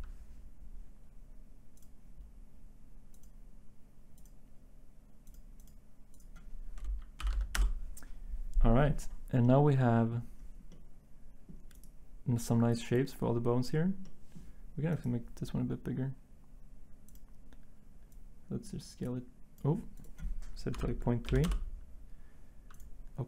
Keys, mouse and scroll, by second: 7.3 2, 7.5 Return, 21.2 3, 21.4 Return.